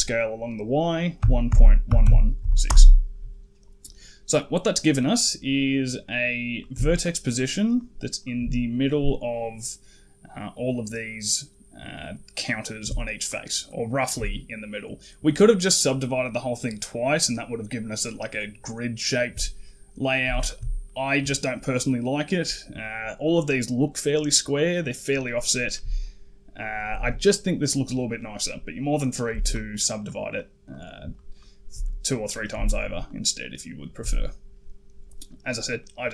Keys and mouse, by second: 4.6 click, 6.4 click, 6.8 shift+click, 7.1 shift+click, 7.5 shift+click, 8.0 shift+click, 8.4 middle click, 11.9 middle click, 13.1 shift+click, 13.5 shift+click, 13.8 shift+click, 14.2 middle click, 19.5 middle click, 20.3 shift+click, 20.7 middle click, 22.6 middle click, 24.6 middle click, 25.3 middle click, 25.9 shift+right click, 26.5 shift+right click, 28.0 middle click, 28.8 middle click, 29.3 shift+click, 29.5 shift+click, 29.8 shift+click, 30.5 shift+click, 30.9 shift+click, 31.2 shift+click, 31.7 middle click, 32.5 shift+click, 33.3 shift+click, 33.6 shift+click, 33.9-35.1 middle drag, 35.6 middle click.